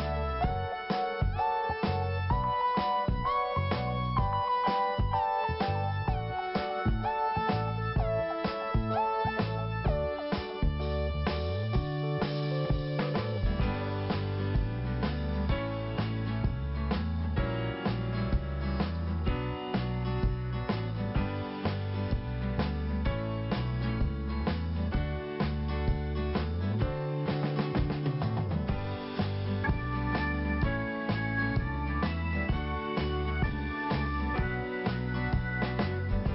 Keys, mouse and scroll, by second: 0.9-1.3 scroll up 1, 2.2 scroll up 1, 2.2 click, 7.5 scroll down 1, 8.1-9.6 typing, 9.5 click, 9.9 click, 10.8 click, 11.0 click, 12.6 click, 14.7 p, 15.6 click, 17.9 click, 18.0 click, 18.6 click, 19.0 click, 20.8 click, 22.9 scroll up 1, 23.7 click, 24.4 click, 28.0 click, 29.5 scroll down 1, 30.1 scroll up 1, 31.0 click, 31.8 click, 32.5 scroll down 1, 33.6 click, 34.2 click, 34.3 click, 34.8 click, 35.6 click.